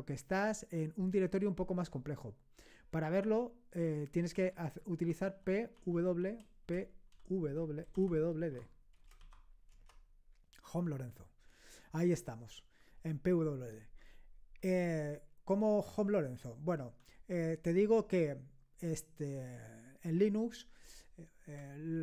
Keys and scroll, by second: 5.0-9.2 typing, 9.7 Return, 10.3 typing.